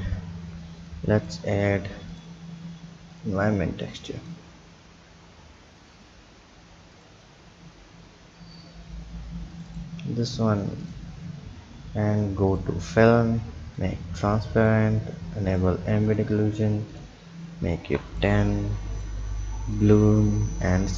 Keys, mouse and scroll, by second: 1.2 click, 2.1-7.3 drag, 7.6-9.4 scroll down 1, 9.4-9.9 scroll down 1, 9.9 scroll down 1, 10.9 drag, 12.5-13.8 drag, 14.6-15.6 drag, 16.1-18.3 drag, 19.0-19.9 drag, 20.7 click.